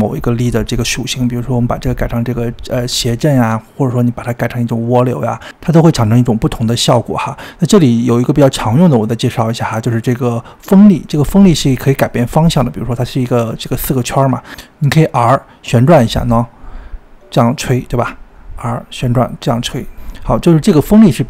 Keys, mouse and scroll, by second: 1.7-3.3 drag, 6.0-7.6 drag, 8.4 scroll down 2, 8.6-9.7 middle drag, 9.7-11.8 drag, 11.8 g, 12.7-15.3 middle drag, 15.3 r, 18.2 r.